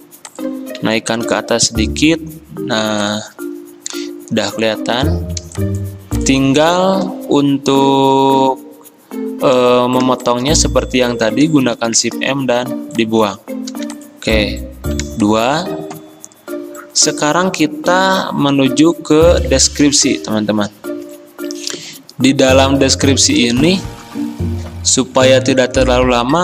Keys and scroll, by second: 1.3 ctrl+], 5.5 m, 13.7 v, 15.2 ctrl+0, 23.6 F10.